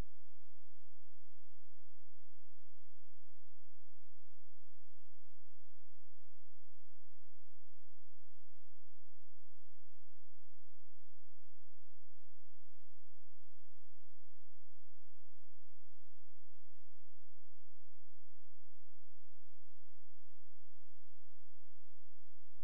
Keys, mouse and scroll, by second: 0.4 scroll up 1, 1.1-1.5 scroll down 1, 1.5-1.9 scroll up 1, 1.9 click, 7.0 click, 12.0 click, 21.4-21.9 scroll down 1, 21.9 click.